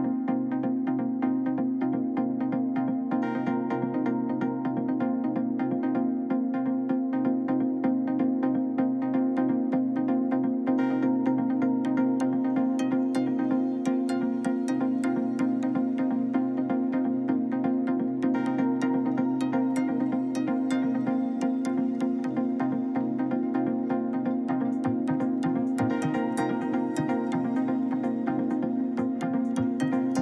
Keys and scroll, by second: 26.1 w, 27.8 BackSpace.